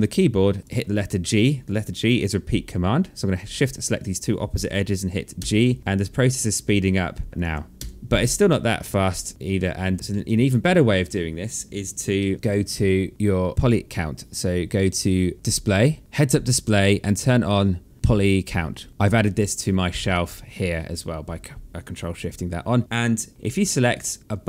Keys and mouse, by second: 0.3 click, 3.3 shift+click, 4.9 g, 5.6 click, 7.3 shift+click, 7.7 g, 8.6 alt+click, 9.3 alt+middle click, 9.8 ctrl+z, 9.9 alt+middle click, 11.7 alt+middle click, 13.3 click, 19.6 click, 21.7 click, 23.3 alt+middle click.